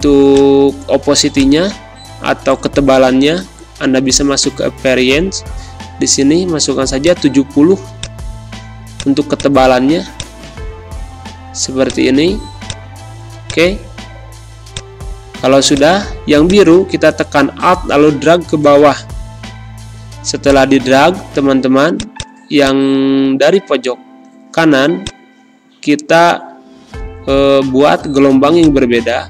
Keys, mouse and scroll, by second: 0.2 click, 2.3 7, 5.2 Return, 6.4 z, 6.9 click, 7.7 space, 7.9 click, 8.2 space, 8.9 click, 9.9 space, 10.1 click, 10.4 space, 11.3 z, 11.8-13.2 drag, 13.2 space, 13.4 click, 13.7 space, 18.7 shift+Pause, 20.4-29.2 drag.